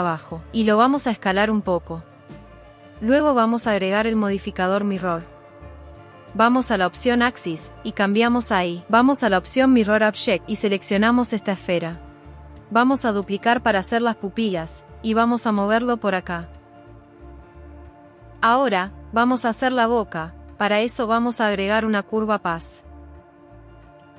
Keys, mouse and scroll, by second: 0.1 s, 1.1 click, 1.7 s, 3.6-6.5 drag, 7.4 click, 7.7 click, 8.6 click, 11.5 g, 13.2 shift+d, 14.3 click, 14.7 s, 15.6 click, 15.8 g, 17.8 click, 20.1 Tab, 20.1 Delete, 20.5 shift+a.